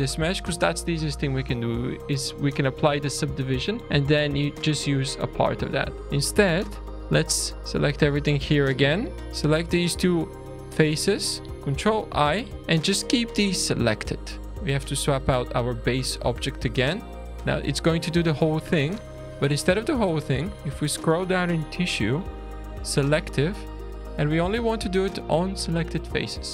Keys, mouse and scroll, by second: 3.1 click, 3.8 click, 4.6 Delete, 4.9 click, 5.5 Delete, 5.7-6.0 scroll down 3, 6.0 click, 6.7 shift+d, 7.6 Tab, 7.7 scroll up 4, 8.2 alt+a, 9.2 alt+click, 9.4 scroll up 2, 10.0 alt+shift+click, 10.5 scroll up 1, 10.6-11.3 scroll down 3, 11.8 ctrl+i, 14.4 Tab, 14.4 click, 14.4 scroll down 2, 14.6 click, 15.1 click, 20.2-21.2 scroll down 5, 21.3-23.0 scroll down 5, 23.0 click, 26.0 click.